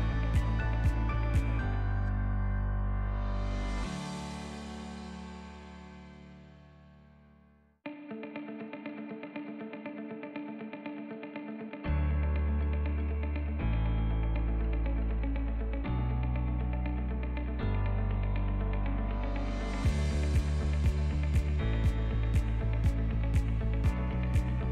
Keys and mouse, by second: 0.8 ctrl+b, 5.0 Tab, 6.0 Tab, 6.4 middle click, 7.1 alt+e, 11.2 middle click, 12.0 middle click, 12.4 shift+middle click, 12.9 middle click, 13.4 shift+middle click, 14.4 3, 14.7 click, 15.4 i, 17.4 r, 18.6 e, 20.4 shift+middle click, 20.8 click, 21.4 shift+click, 21.9 click, 22.5 i.